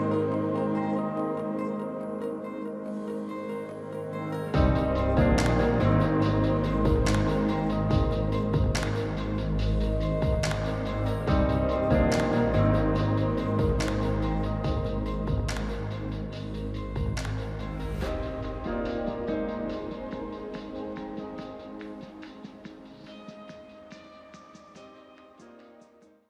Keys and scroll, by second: 1.0 s.